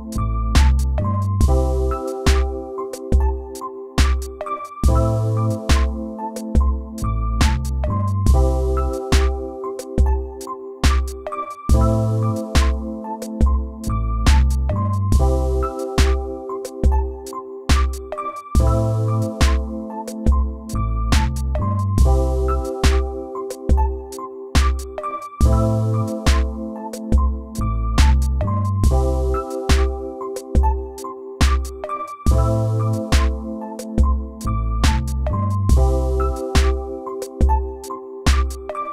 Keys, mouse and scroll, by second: 1.9 right click, 2.1 right click, 18.7 right click, 19.2 right click, 19.9 right click, 21.3 right click, 23.4 right click, 26.0 right click, 27.0 right click.